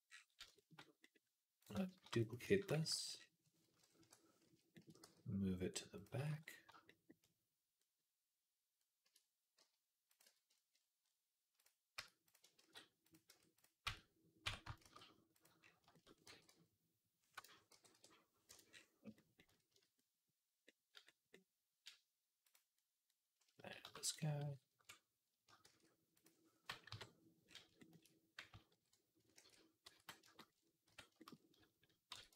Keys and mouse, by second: 0.0-1.4 middle drag, 1.4 click, 1.6-9.0 shift+middle drag, 1.8 shift+d, 2.8 alt+g, 3.8 KP_3, 4.9 g, 9.4-11.8 middle drag, 9.4 g, 10.1 z, 11.8 Tab, 12.1 click, 12.5 shift+s, 13.4 Tab, 13.4 click, 13.7 Tab, 14.3 Tab, 14.7 shift+s, 15.4-18.6 shift+drag, 16.1 g, 17.5 g, 19.0-22.3 middle drag, 19.6 z, 22.3 click, 22.6 middle click, 23.6 shift+d, 24.3 alt+g, 25.5 shift+s, 26.7 KP_3, 29.2 ctrl+a, 30.7 Tab, 32.0 r.